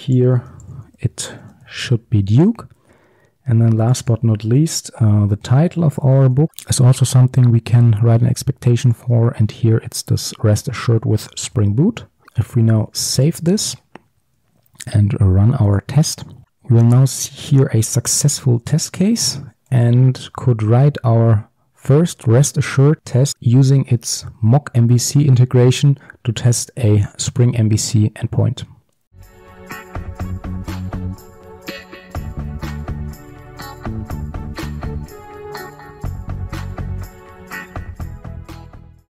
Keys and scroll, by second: 2.5 ctrl+d, 6.5 ctrl+c, 9.1 ctrl+v, 12.2 ctrl+z, 13.5 ctrl+x.